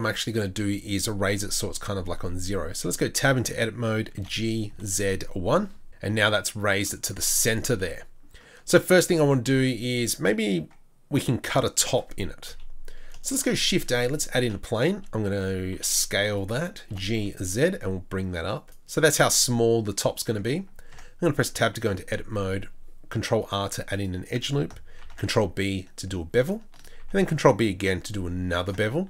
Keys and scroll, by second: 12.5 KP_3, 13.3 shift+a, 15.7 s, 16.9 g, 20.9 Tab, 22.3 ctrl+r, 25.0 ctrl+r, 25.1 ctrl+b, 26.9 ctrl+b.